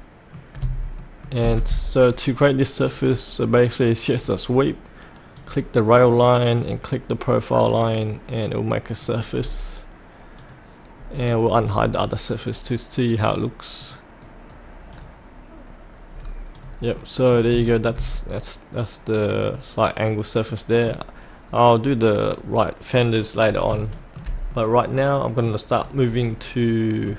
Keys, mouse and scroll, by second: 0.5 scroll down 1, 1.0 shift+middle click, 1.5 scroll down 1, 2.8 click, 9.4-10.3 scroll up 1, 10.3 click, 12.0 right click, 13.1 click, 14.2 right click, 14.9 click, 16.1-16.5 scroll up 1, 16.5 click, 16.9 middle click, 17.6 shift+middle click, 23.4 scroll up 1, 23.9 shift+middle click, 24.5 middle click, 25.7-26.3 scroll down 1, 26.3 middle click.